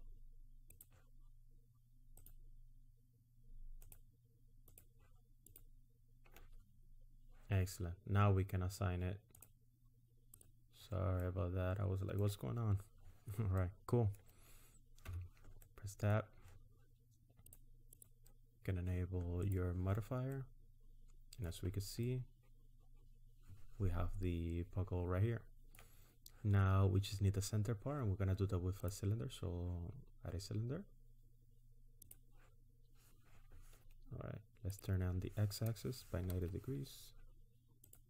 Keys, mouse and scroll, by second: 0.9 ctrl+click, 2.3 ctrl+click, 4.0 ctrl+click, 4.8 ctrl+click, 5.6 ctrl+click, 6.8-7.1 scroll down 4, 9.2 click, 10.4 click, 11.1 middle click, 13.6 middle click, 15.0 Tab, 15.7 middle click, 17.5 click, 17.9 click, 19.5 click, 20.4 middle click, 21.6-22.0 scroll down 3, 22.0 middle click, 28.8 click, 34.7 click.